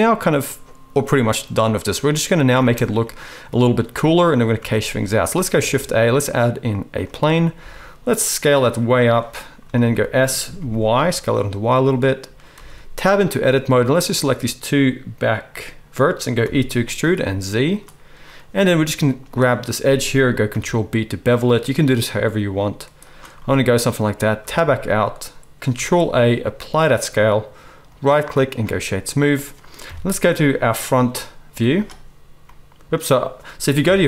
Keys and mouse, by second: 2.7 space, 5.5 shift+a, 7.5 s, 9.8-13.3 middle drag, 9.8 s, 12.5 Tab, 13.3 click, 13.3-27.8 middle drag, 16.4 e, 20.4 ctrl+b, 24.3 Tab, 25.7 ctrl+a, 27.8-28.5 drag, 28.5-32.9 right drag, 29.8 KP_1, 31.5 z, 32.9-33.8 drag, 33.8-34.0 right drag, 33.8 KP_1.